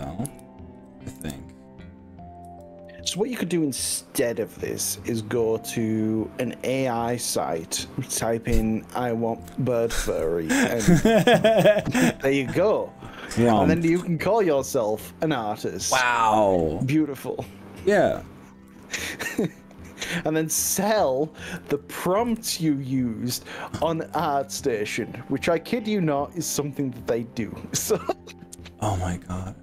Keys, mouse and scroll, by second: 0.3 KP_1, 1.2 KP_3, 2.5 g, 13.5 click, 13.8-14.3 middle drag, 14.4-15.3 middle drag, 15.9 middle click, 17.1 click, 17.7 middle click, 18.7 g, 20.1 KP_1, 20.9 click, 21.7 ctrl+z, 22.3 KP_1, 23.7 g.